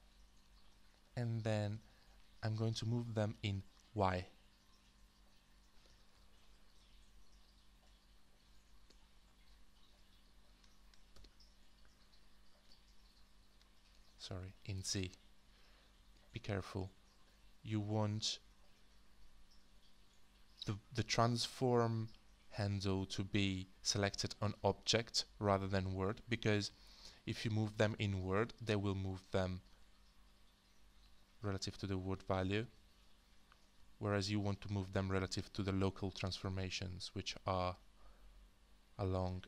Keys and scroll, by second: 6.1 ctrl+z, 11.1 alt+w, 11.8-12.7 typing, 15.9 alt+w, 16.4-28.3 typing, 33.9 z, 34.3 z, 35.8 typing.